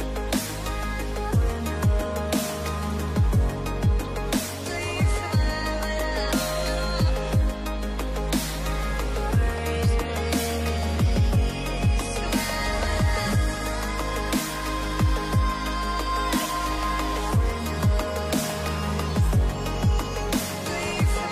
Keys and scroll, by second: 9.9 space, 11.4 space.